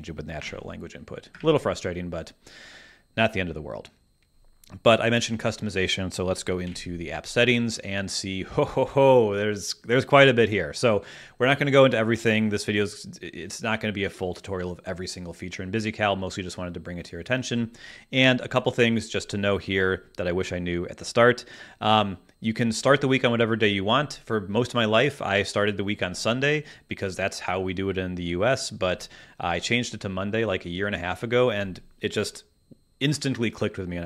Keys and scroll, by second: 1.1 BackSpace, 1.4 Return, 6.6 super+,, 7.3 super+,.